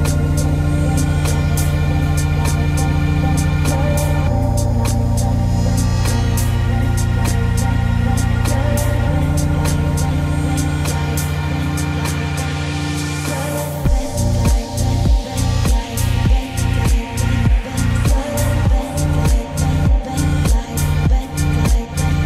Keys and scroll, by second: 3.6 ctrl+d, 6.7 ctrl+;, 7.2 ctrl+space, 14.9 ctrl+g, 16.4 ctrl+space.